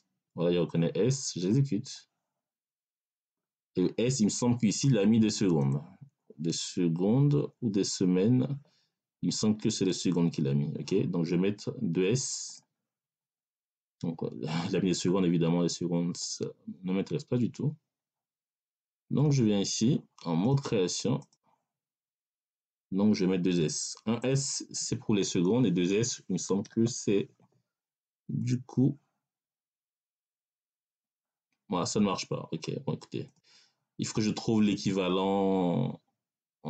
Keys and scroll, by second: 26.5 s.